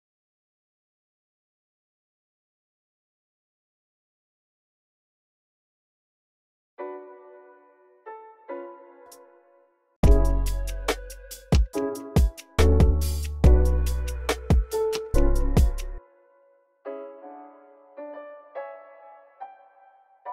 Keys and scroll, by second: 2.1 s, 4.0 x, 6.3 space, 7.8-9.3 typing, 15.8 s, 16.2 e, 16.5 super+a, 17.1 alt+shift+Down, 18.0 alt+shift+Up, 19.6-20.3 typing.